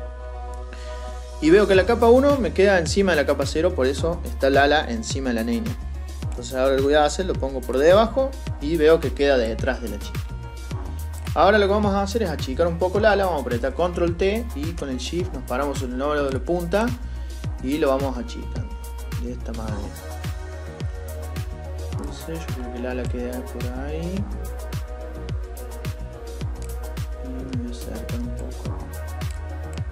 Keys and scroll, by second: 13.3 ctrl+t.